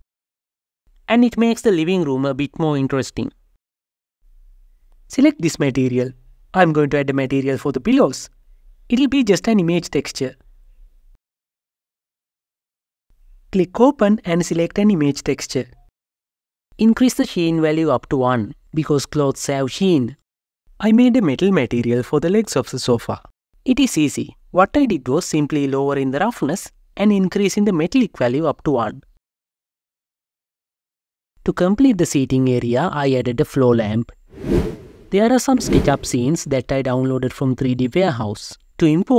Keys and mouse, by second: 0.7-1.7 drag, 4.8 click, 7.0 KP_Decimal, 8.9 click, 10.6-12.5 drag, 12.9 click, 13.7 click, 17.5-20.2 drag, 20.0 ctrl+l, 21.6 click, 23.0 click, 24.6 click, 26.6-27.7 drag, 29.0 click, 31.1 g, 31.6 shift+z, 36.7-39.1 drag.